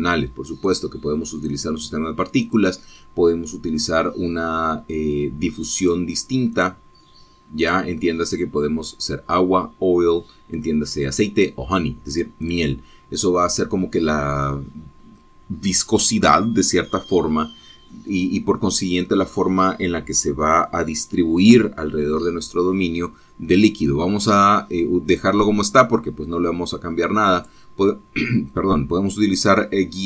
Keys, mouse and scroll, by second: 2.0 click, 2.8 click, 3.8 click, 7.1 click, 7.9 click, 9.0 click, 13.8 click, 26.4 click, 28.7 click.